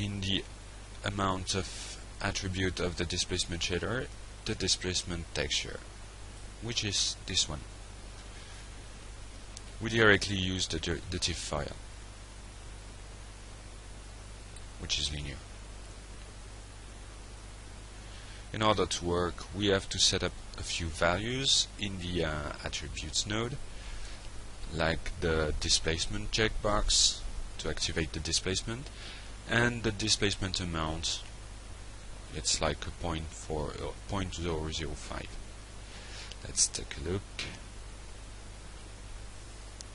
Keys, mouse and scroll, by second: 0.7 click, 1.6 alt+Tab, 8.9 click, 11.2 click, 15.1 click, 17.2 click, 18.3 click, 18.9 click, 23.8 click, 26.9 click, 29.0 shift+., 29.3 shift+0, 29.9 shift+5, 30.9 Return, 32.8 click, 35.2 click.